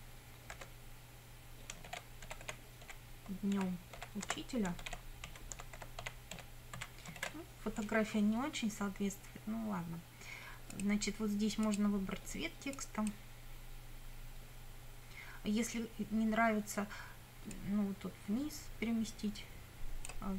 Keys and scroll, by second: 0.6 space, 1.9-7.2 typing.